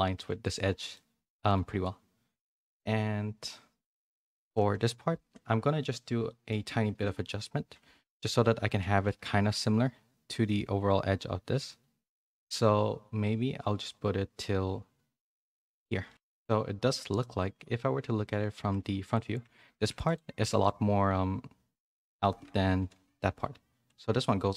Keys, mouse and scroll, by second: 0.9 middle click, 4.5 KP_1, 6.2 middle click, 8.4 z, 9.0 g, 16.1 middle click, 17.2 middle click, 18.6 Tab, 19.0 click, 19.4 Tab, 19.7 2, 20.0 click, 20.4 middle click, 21.7 middle click, 22.7 KP_1.